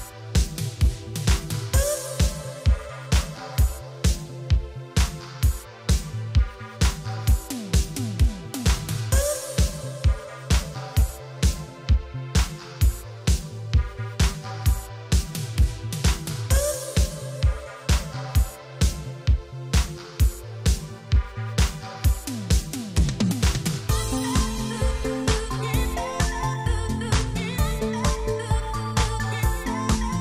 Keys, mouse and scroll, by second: 2.5-3.1 scroll up 3, 3.3 shift+middle click, 3.5 scroll up 1, 5.3 click, 5.4 click, 6.8 click, 6.8 click, 7.5 middle click, 7.9-8.3 scroll up 3, 8.3 middle click, 8.7-9.1 scroll up 3, 9.9 click, 14.8 click, 14.9 click, 15.1 click, 15.1 double click, 16.7 Delete, 16.8 Return, 18.6 click, 24.4 shift+space, 25.6 Escape, 27.1 click.